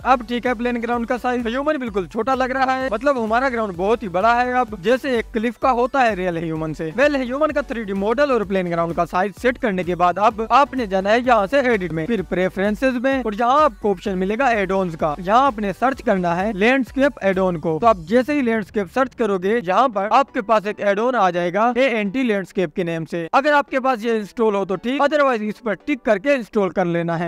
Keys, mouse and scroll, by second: 0.1-0.7 drag, 3.5 click, 3.9-4.6 scroll up 1, 4.6 drag, 4.8-5.2 scroll down 2, 6.0 drag, 9.3 click, 10.7 drag, 11.6 click.